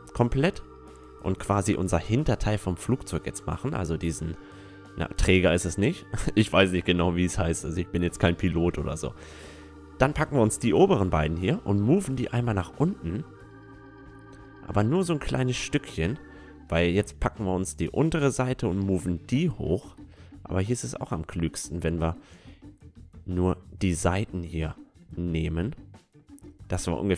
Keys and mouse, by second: 3.2 a, 3.4 Tab, 3.7-6.9 middle drag, 6.2 Tab, 7.5-9.2 right drag, 8.3-10.2 drag, 10.2-12.0 right drag, 10.8-12.5 drag, 15.4-17.2 middle drag, 15.9 a, 17.2-20.9 drag, 17.8-19.6 right drag, 19.4 middle click, 20.7-23.0 middle drag, 22.4-24.3 drag, 23.0-26.1 right drag, 23.3 middle click, 25.7-27.1 drag.